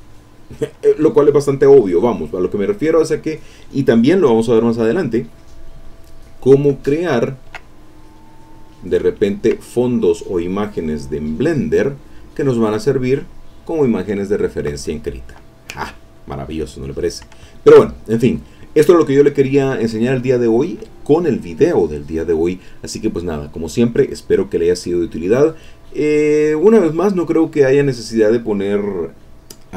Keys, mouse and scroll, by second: 1.3 click, 2.0-3.6 drag, 6.4 click, 7.0-8.0 ctrl+middle drag, 7.5-8.0 ctrl+scroll up 1, 8.0 click, 9.1 ctrl+middle click, 9.1-9.6 ctrl+scroll up 1, 9.6-10.2 ctrl+scroll up 1, 10.2 click, 17.5 ctrl+click, 17.9 ctrl+click.